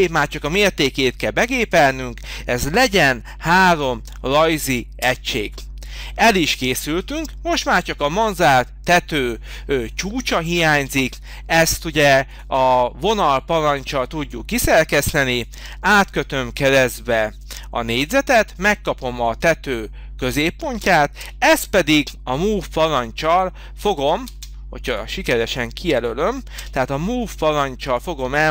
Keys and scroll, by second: 3.6 3, 10.8 space, 21.2 m, 23.8 Escape, 24.3 space, 26.6 m.